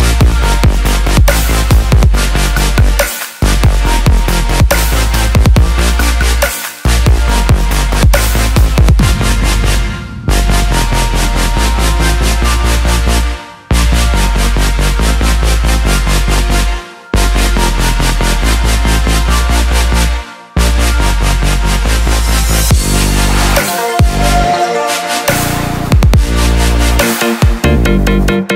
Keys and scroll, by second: 0.2 BackSpace, 26.8 ctrl+=.